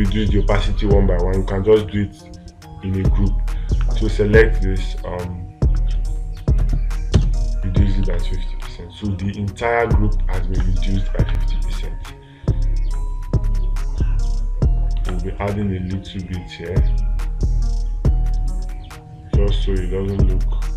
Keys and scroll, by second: 9.1 space, 11.0 space, 11.7 space, 15.5 space.